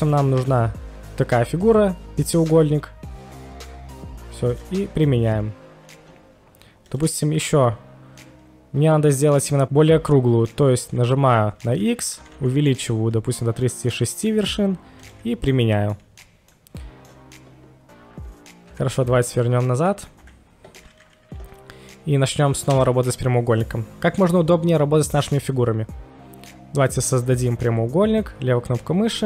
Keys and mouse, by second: 6.9 drag, 10.8-12.3 typing, 14.9 click, 15.5-15.9 middle drag, 16.5-18.7 middle drag, 18.8 ctrl+z, 19.1 ctrl+z, 20.2 KP_1, 22.7 space, 26.8 click.